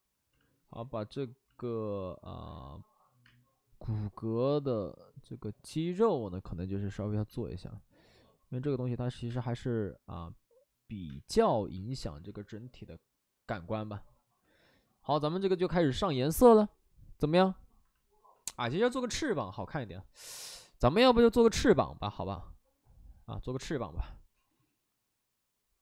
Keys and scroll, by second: 0.3 ctrl+z, 1.6 ctrl+z, 3.5 space, 7.3 ctrl+z, 9.2 space, 12.5 space.